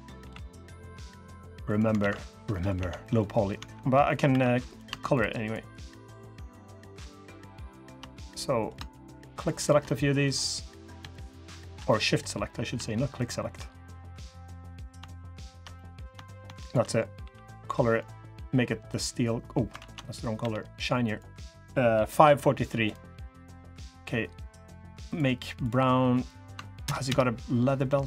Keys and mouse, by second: 0.0 g, 1.1 g, 1.7 alt+z, 2.3 click, 2.5 Tab, 2.8 click, 3.3 Tab, 3.8 click, 4.0 3, 7.9 click, 9.6 click, 11.6 middle click, 13.7 click, 14.3 click, 15.5 click, 17.0 g, 19.5 ctrl+z, 20.1 g, 22.9 click, 23.6 click, 24.1 click, 26.6 ctrl+KP_Add.